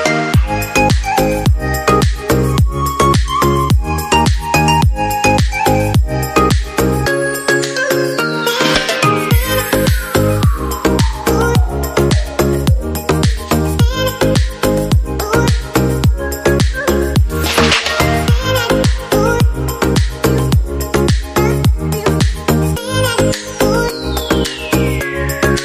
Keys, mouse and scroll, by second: 2.1 shift+Page_Up, 7.8 right click, 9.9 ctrl+Left, 10.7-11.7 scroll up 1, 12.6 F3, 22.3 shift+Page_Up.